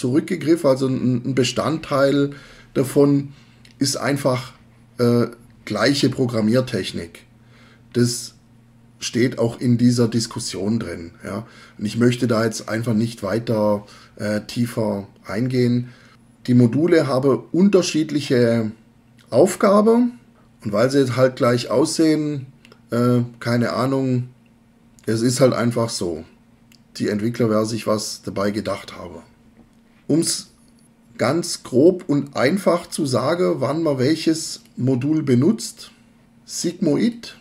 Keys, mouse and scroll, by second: 37.1-37.4 drag.